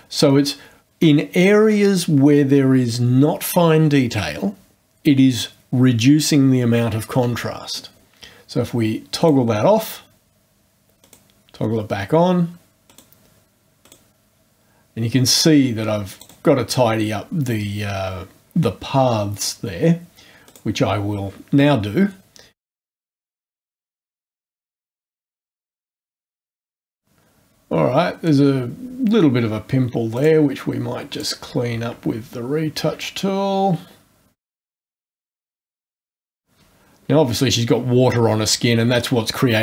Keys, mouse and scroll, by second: 9.2 click, 11.0 click, 12.8 click, 13.8 click, 16.1 click, 20.4 click, 22.6 click, 22.9 click, 23.3 click, 23.6 click, 23.8 click, 24.0 click, 24.2 click, 24.5 click, 24.8 click, 25.3 click, 25.8 click, 25.9 click, 26.1 click, 26.2 click, 26.6 click, 26.8 click, 28.4-28.8 scroll up 2, 30.1 click, 31.1 click, 32.2-32.8 ctrl+scroll up 1, 34.4 click, 34.5 scroll down 2, 34.6 scroll up 2, 34.7 click, 35.2 click, 35.7 click, 35.8 scroll up 1, 36.0 click, 36.3 click.